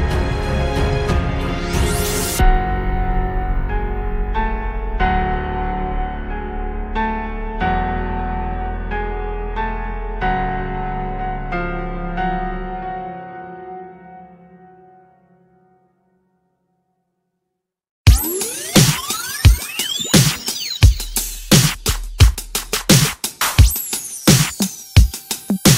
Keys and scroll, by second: 5.9 Escape, 20.6 Return.